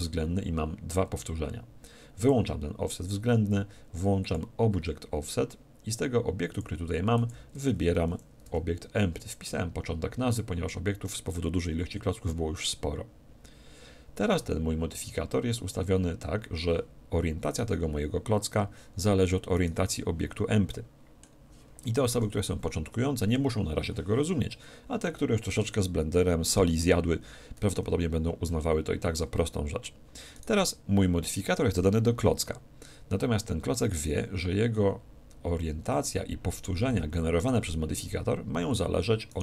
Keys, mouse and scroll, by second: 2.2-3.9 drag, 4.2-6.2 drag, 6.5-8.5 drag, 17.5-19.3 right drag, 19.5-21.2 right drag, 20.7-22.7 middle drag, 22.1 KP_7, 30.3-32.1 right drag, 39.3-39.4 right drag.